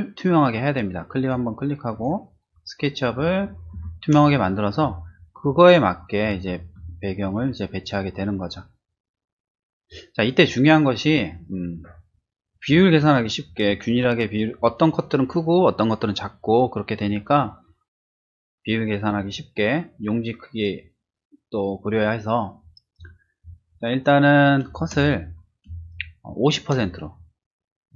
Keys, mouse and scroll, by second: 1.9 click, 3.7 ctrl+shift+z, 12.4 ctrl+shift+z, 12.9 click, 23.0 ctrl+-, 24.7 space, 25.6 space, 25.9 click.